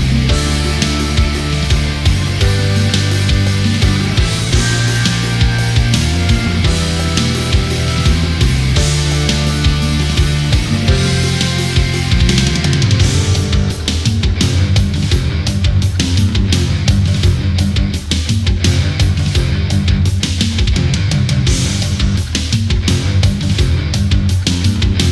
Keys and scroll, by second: 0.8 space, 1.9 space, 3.6 space, 5.5 space, 6.1 ctrl+-, 6.5 space, 8.3 ctrl+z, 9.8 space, 13.1 ctrl+=, 14.7 space, 15.8 space, 16.8 space, 17.8 space, 20.2 space, 21.6 space, 23.6 space, 24.2 space.